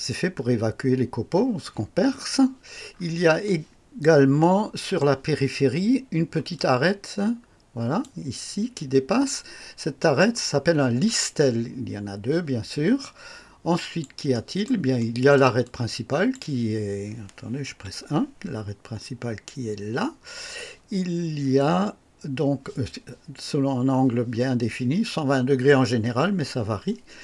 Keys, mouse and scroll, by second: 2.9-3.2 scroll up 1, 3.4-4.2 right drag, 4.4-5.2 right drag, 6.5-8.2 drag, 10.0 click, 10.6 scroll down 1, 13.0-14.2 drag, 14.3 right click, 15.0-15.5 right drag, 15.6-16.5 drag, 17.6 KP_1.